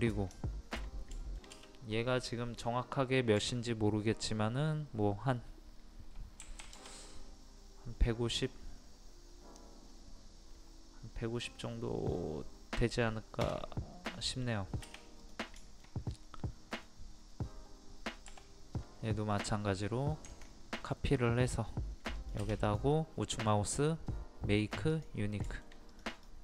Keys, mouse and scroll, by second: 0.2 middle click, 1.2 shift+middle click, 3.4 t, 4.2 click, 6.4 KP_1, 13.4 Return, 14.4 middle click, 15.3 click, 15.6 shift+middle click, 16.1-16.4 scroll up 1, 16.4 middle click, 17.1-18.2 scroll up 1, 18.3 m, 18.8 middle click, 20.3 ctrl+click, 22.7 right click, 24.9 click, 25.4 middle click, 25.9 click.